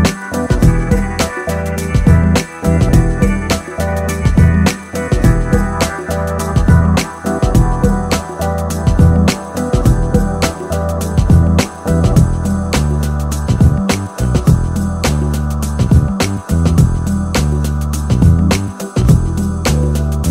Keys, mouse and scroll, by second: 0.8 middle click, 2.3 s, 5.7 middle click, 7.5 KP_3, 8.2 KP_5, 14.5 middle click, 14.6 middle click, 17.4 KP_3, 19.7 click.